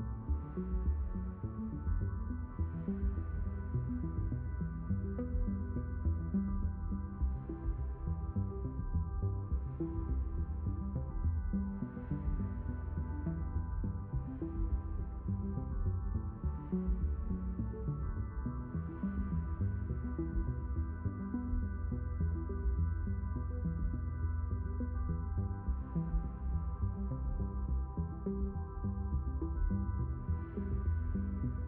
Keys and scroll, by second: 7.5 Return, 12.9 q, 31.0 ctrl+2.